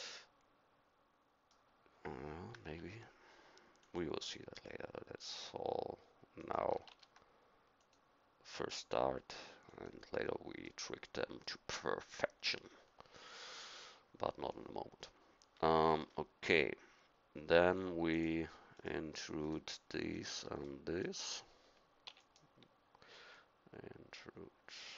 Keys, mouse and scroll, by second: 0.1 click, 2.8 ctrl+r, 6.9 ctrl+r, 10.7-17.6 middle drag, 18.7-20.6 middle drag, 20.6-22.1 drag, 22.1 e.